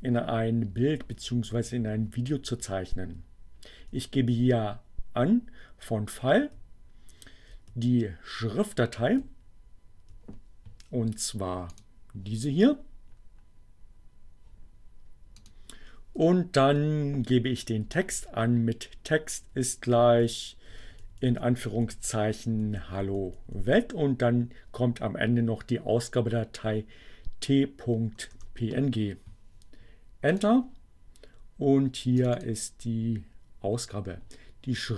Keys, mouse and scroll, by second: 2.1 Right, 4.8 Right, 11.7 click, 15.3 click, 16.3 Right, 18.4 Right, 27.7 Return, 30.3 click, 31.7-32.7 drag.